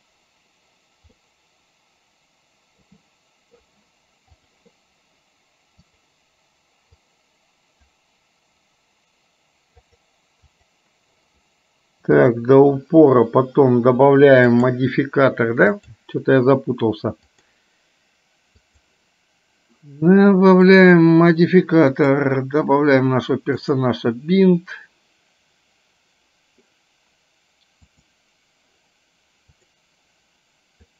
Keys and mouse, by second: 1.3-2.9 middle drag, 5.9 click, 7.3 click, 10.6 click, 12.3 click, 14.6 click, 15.8-17.5 drag, 18.6 click, 23.6 click, 28.0 click, 29.5 click.